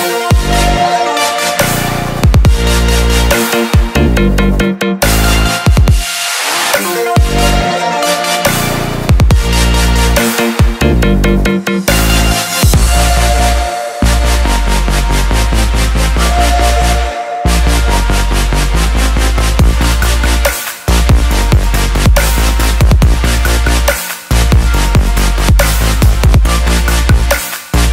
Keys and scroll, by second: 7.6 ctrl+z.